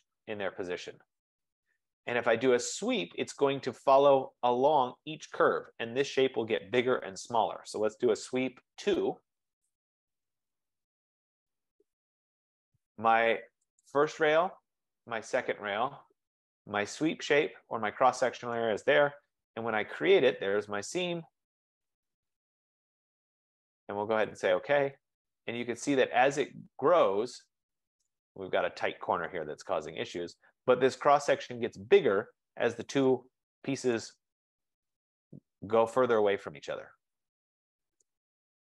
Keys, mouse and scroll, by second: 2.3 right click, 3.5-7.2 right drag, 7.6-10.5 typing, 10.9 Return, 11.7-12.4 typing, 14.0 click, 14.7 typing, 15.4 click, 17.6 click, 19.2 Return, 20.8 Return, 24.6 click, 26.1-26.4 scroll up 4, 27.4 middle click, 27.5 F15, 28.4 right click, 29.1 scroll, 29.9-30.2 scroll, 32.2 scroll, 34.5 right click, 34.6 scroll.